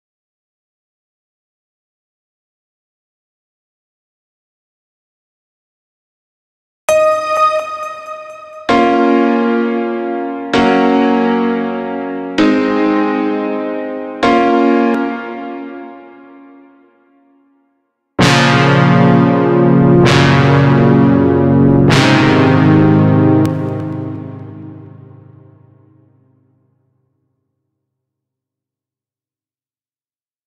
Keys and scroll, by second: 6.3 space, 14.4 space, 22.8 space.